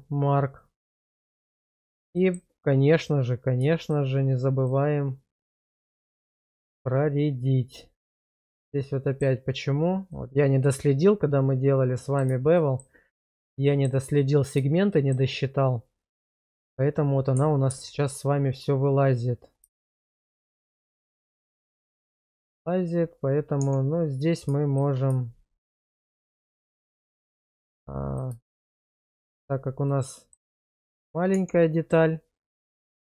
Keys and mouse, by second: 0.6-1.7 middle drag, 2.1 middle click, 5.8 shift+click, 6.6-9.2 middle drag, 10.1-12.2 middle drag, 12.6 shift+middle click, 13.7 shift+middle click, 14.9 shift+middle click, 19.8 shift+middle click, 20.3-22.6 middle drag, 23.6 Tab, 27.3 1, 28.1 click, 28.5 shift+click, 28.9 1, 29.9 middle click, 30.8 shift+middle click, 31.3 Tab.